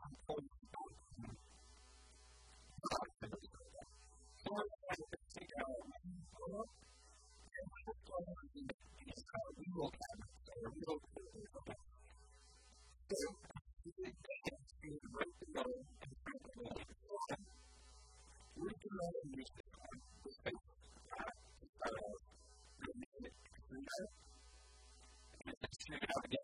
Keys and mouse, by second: 1.7 a, 6.2 Tab, 6.5 KP_1, 6.9 KP_3, 13.5 KP_1, 16.5 Tab, 18.3-19.6 shift+middle drag, 19.9 shift+middle click, 22.4 KP_1, 22.7 KP_3, 22.9 KP_1, 23.3 e, 25.6 e, 26.3 r.